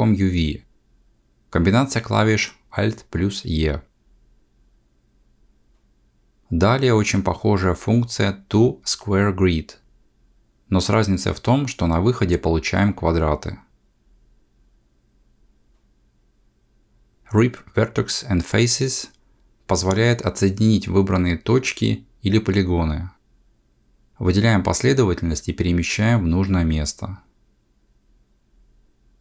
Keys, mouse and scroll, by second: 3.4 click, 9.0 a, 11.0 click, 20.3 click, 20.6 1, 21.3 c, 24.1 click, 24.7 g, 28.4 3, 29.0 alt+a.